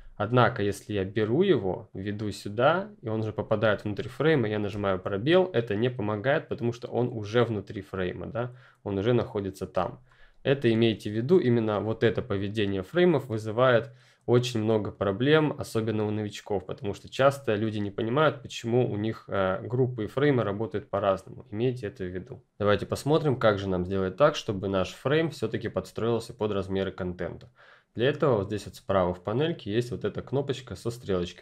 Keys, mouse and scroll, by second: 0.4 click, 4.7 space, 18.0 click.